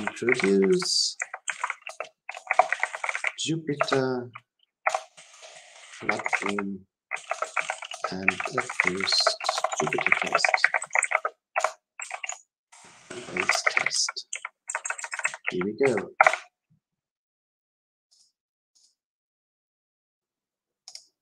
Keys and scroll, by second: 19.3 ctrl+alt+k.